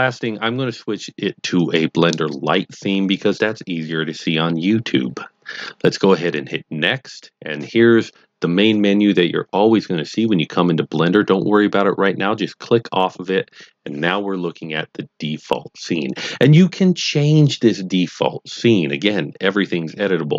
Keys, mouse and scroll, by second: 0.0 click, 1.5 click, 6.3 click, 13.0 click.